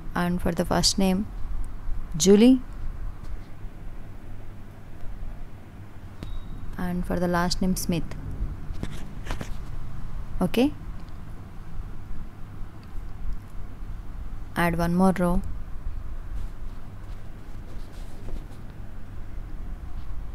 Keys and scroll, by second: 1.3 Right, 19.6 Down.